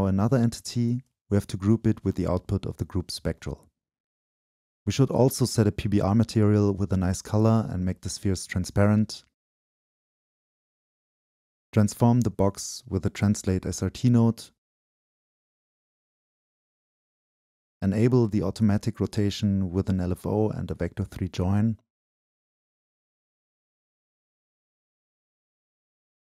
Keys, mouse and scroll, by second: 0.0-1.5 drag, 1.8-4.7 drag, 4.7-6.2 right drag, 6.2-9.8 drag, 10.4 click, 11.8-13.3 drag, 13.8-17.9 drag, 21.3-26.3 drag.